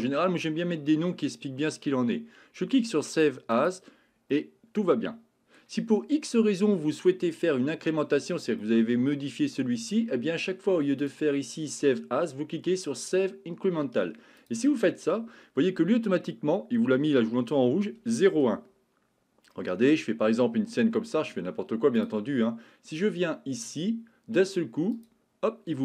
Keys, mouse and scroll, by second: 4.3-5.6 middle drag, 8.6 middle click, 11.0-14.6 drag, 19.5-20.8 middle drag, 22.0-25.2 drag.